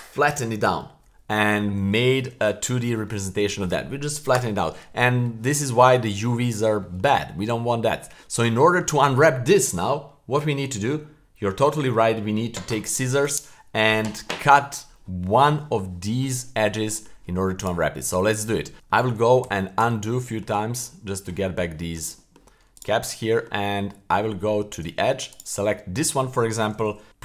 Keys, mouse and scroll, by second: 2.2 a, 5.9 middle click, 6.5-7.0 middle drag, 7.4-8.2 middle drag, 8.5-8.8 middle drag, 15.9 middle click, 16.7-17.1 middle drag, 17.6 right click, 17.9 middle click, 19.0 super+z, 19.4 super+z, 19.8 super+z, 20.2 middle click, 20.9-21.3 middle drag, 21.7 middle drag, 22.2 middle click, 22.7-23.1 right drag, 23.1-23.5 scroll up 1, 23.9 middle click, 24.3 Tab, 25.3 right click, 25.7 middle click, 27.1 super+z, 27.1 w.